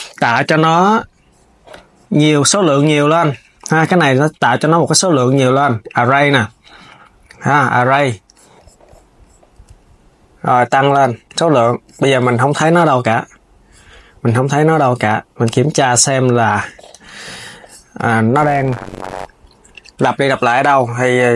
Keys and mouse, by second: 2.9 click, 4.2-7.2 drag, 10.4-13.9 drag, 15.1 click, 16.6 KP_3, 19.4 click, 20.9 click.